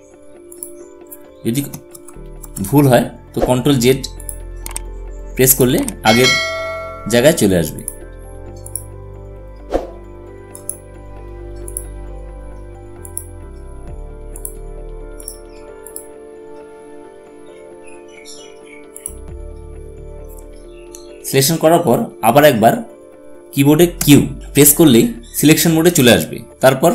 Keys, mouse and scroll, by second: 1.7 ctrl+z, 3.9 click, 7.5 click, 18.7 click, 23.7 q.